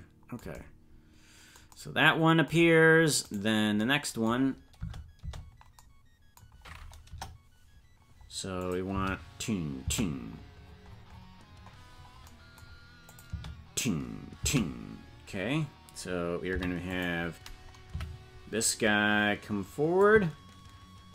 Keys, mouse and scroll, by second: 3.4 right click, 4.7 space, 5.2 space, 7.0 KP_0, 8.5 click, 8.8 space, 10.6-11.2 scroll down 1, 11.2-11.7 scroll down 14, 11.7-13.0 scroll up 8, 13.0 click, 13.2 space, 16.4 space, 16.4 i, 18.0 Right, 20.0-21.1 drag.